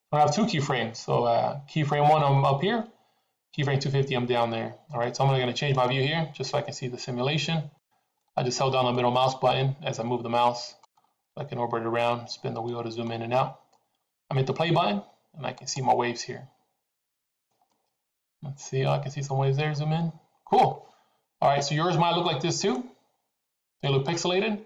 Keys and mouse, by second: 5.6-7.7 middle drag, 8.1-10.8 middle drag, 11.9-13.1 middle drag, 22.3-23.0 middle drag.